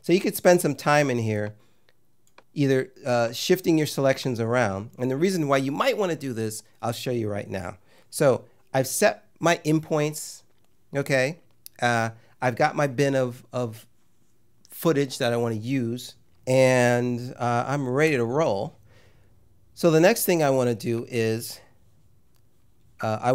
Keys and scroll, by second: 18.0 `.